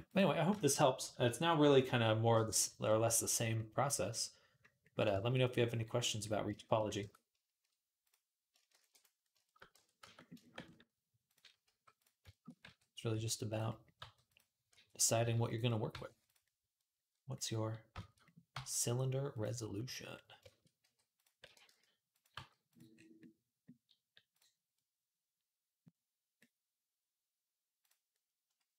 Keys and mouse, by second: 6.8 Tab, 8.5 shift+d, 9.5 Tab, 9.8 a, 11.0 click, 11.1 middle click, 11.4 g, 11.6-15.0 drag, 12.4 r, 13.8 g, 14.5 r, 15.0-24.1 middle drag, 15.0 s, 15.7 g, 18.3 g, 20.6 g, 21.2 r, 22.2 g, 24.1 click, 24.3-27.6 middle drag, 27.6 click, 27.9-28.7 middle drag.